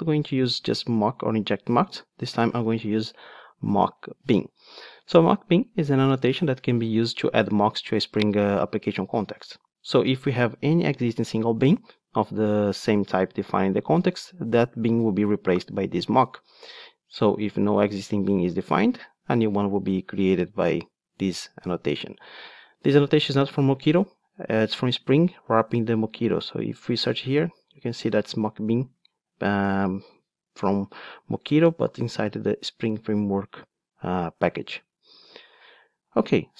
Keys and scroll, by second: 3.9 Return.